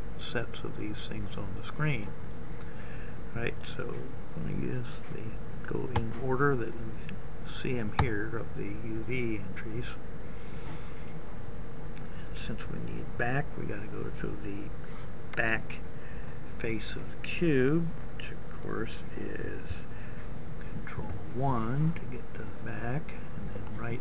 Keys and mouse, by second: 3.4-6.5 drag, 8.3 click, 19.3 ctrl+KP_1.